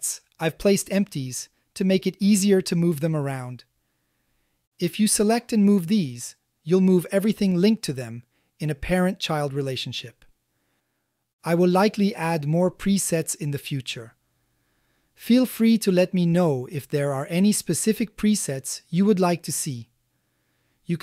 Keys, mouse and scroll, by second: 0.6 shift+middle click, 3.0 click, 3.6-4.0 shift+middle drag, 4.3 g, 4.5 x, 5.1-6.6 drag, 7.6 shift+drag, 8.7 g, 9.0 x, 10.8-11.4 shift+middle drag, 11.8-12.7 middle drag, 13.2-13.6 shift+middle drag, 14.1 middle click, 15.6 click, 16.0 g, 16.3 x, 19.4-20.1 middle drag, 20.6 ctrl+click.